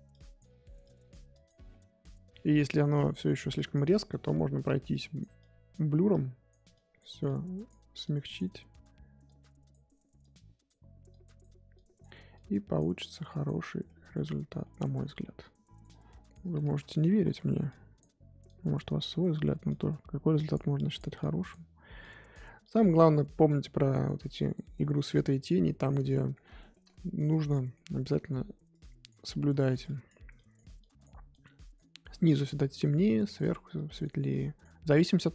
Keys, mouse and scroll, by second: 1.7-2.8 middle drag, 2.8-3.9 drag, 3.9 middle click, 4.9-13.7 drag, 13.7-14.2 scroll down 2, 13.8 middle click, 14.2-14.6 scroll up 3, 14.6 middle click, 15.4-16.6 drag, 16.6 ctrl+z, 17.1 ctrl+z, 17.6-24.8 drag, 24.8 scroll down 4, 25.0-27.8 middle drag, 27.8-28.7 scroll up 8, 28.1 middle click, 28.7 click, 29.2-29.8 scroll down 1, 29.8-35.2 drag, 35.2 middle click.